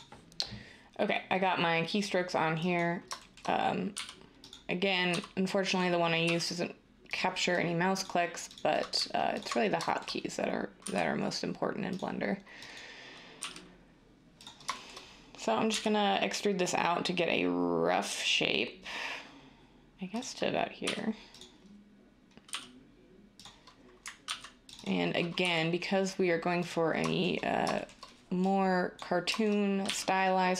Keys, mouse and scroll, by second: 3.9 e, 5.1 s, 6.2 g, 10.8 g, 13.4 g, 15.7 e, 20.9 r, 22.5 g, 24.2 ctrl+r, 25.4 s, 29.8 e.